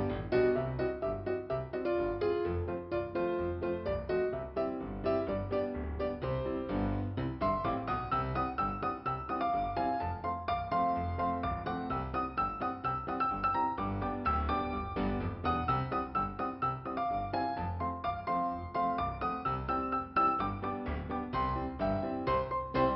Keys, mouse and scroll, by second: 1.0-1.8 scroll up 1, 4.7 click, 5.7 click, 6.7 click, 8.6 click, 17.4 click, 18.7 f, 19.4-19.8 scroll up 2, 20.4-21.1 scroll down 1, 22.6 click.